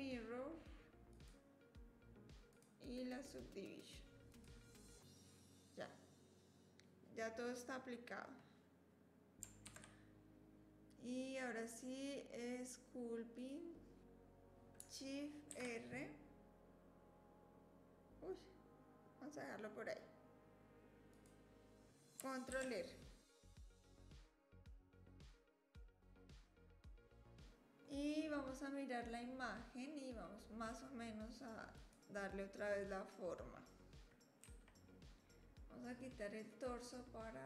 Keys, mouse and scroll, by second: 2.6-4.4 drag, 9.6 ctrl+s.